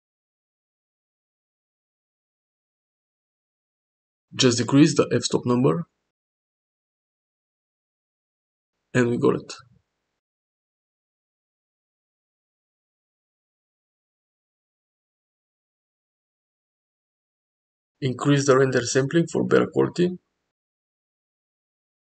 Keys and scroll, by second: 13.6 Tab, 13.8 Tab, 13.8 1, 14.9 ctrl+a, 16.3 ctrl+a, 16.8 z, 17.2 Tab, 21.9 0.